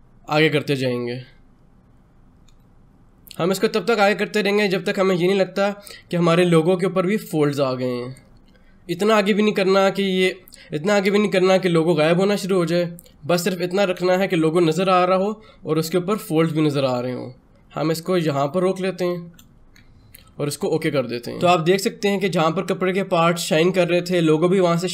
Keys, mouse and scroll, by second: 20.5 click.